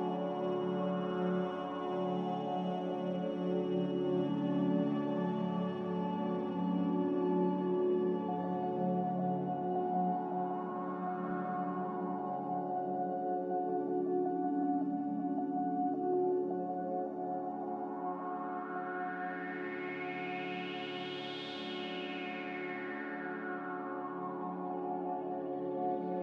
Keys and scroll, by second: 3.6 z, 15.8 a.